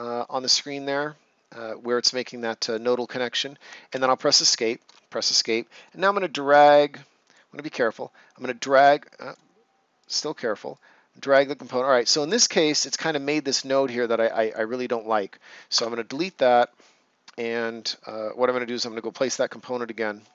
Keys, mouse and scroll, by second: 2.7 click, 15.7 Delete, 16.5 click, 19.2 c.